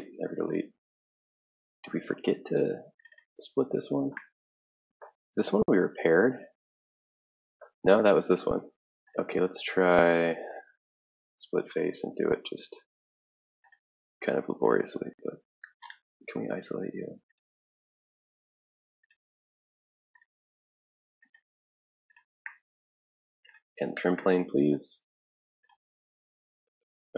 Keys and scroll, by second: 14.2 ctrl+z, 16.6 ctrl+z, 17.8 Tab, 19.3 ctrl+z, 19.5 alt+Tab.